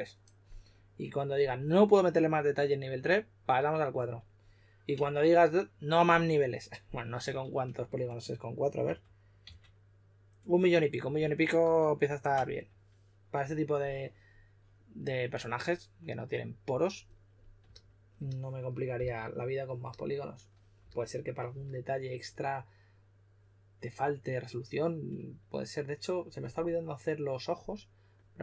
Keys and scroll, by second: 8.8 super+d, 9.3 super+d, 10.9 super+z, 11.5 super+z, 18.9 s, 20.7 s.